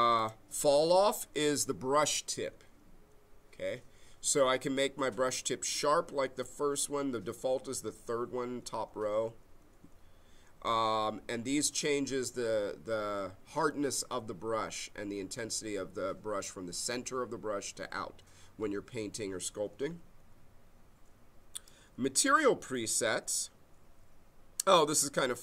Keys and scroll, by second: 12.8 6.